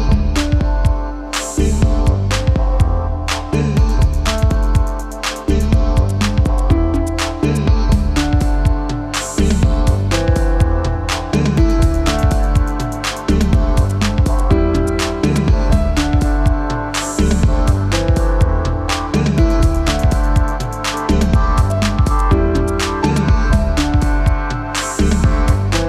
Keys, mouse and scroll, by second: 0.1 click, 6.3 space, 6.4 click, 6.9 alt+scroll up 1, 7.6-10.8 drag, 10.9 shift+click, 11.7 click, 13.4-14.2 alt+click, 18.5 shift+click, 21.3 click, 23.2 space, 23.3-23.7 click, 23.6 space, 24.3 alt+scroll down 1, 24.6 click, 25.1 scroll up 1, 25.6 shift+click.